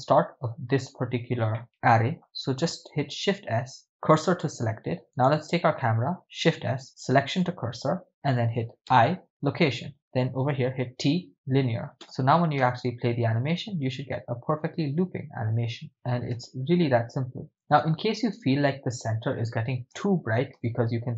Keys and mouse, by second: 1.6-2.4 middle drag, 3.1 shift+s, 5.4 right click, 6.4 shift+s, 8.9 i, 10.5 t, 12.0 KP_0, 12.7 shift+space, 16.4 shift+space, 17.5 shift+space, 18.0 shift+space, 20.0 shift+space, 20.7 shift+space.